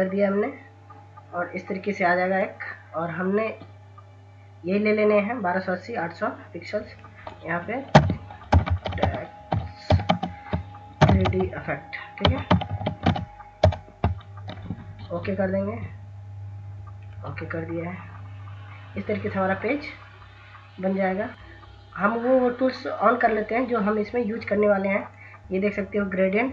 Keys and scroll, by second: 7.4-13.1 typing, 20.7 ctrl+-, 26.2 ctrl+s.